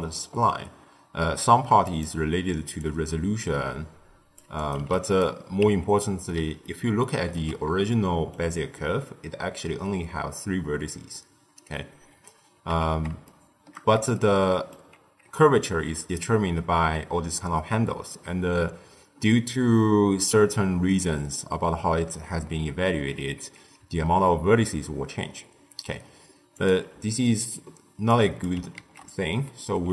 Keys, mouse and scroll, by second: 2.8-5.6 drag, 5.6 Tab, 6.6-12.6 ctrl+middle drag, 12.6 Tab, 13.2-14.9 shift+middle drag, 14.9 Tab, 23.7 Tab, 26.6 click, 26.8 x, 28.0-29.9 drag.